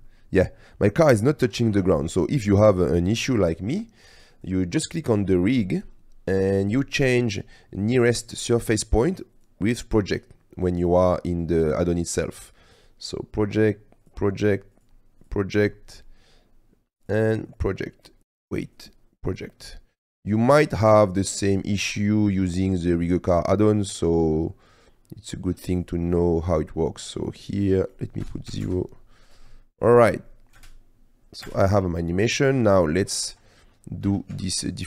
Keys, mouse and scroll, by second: 0.2-0.8 drag, 0.8-1.2 middle drag, 1.4-2.0 middle drag, 2.7 middle click, 8.9-9.5 drag, 11.7-12.9 drag, 13.7-14.2 drag, 14.8-15.4 drag, 17.3 click, 19.0-19.5 drag, 21.6 middle click, 22.0-23.4 middle drag, 24.1-24.5 middle drag, 24.5-25.4 drag, 25.9 click, 27.3 click, 28.5 click, 28.5 KP_0, 29.7 click, 30.4 click, 30.8 space, 31.7 space, 31.9 click, 34.4 Tab.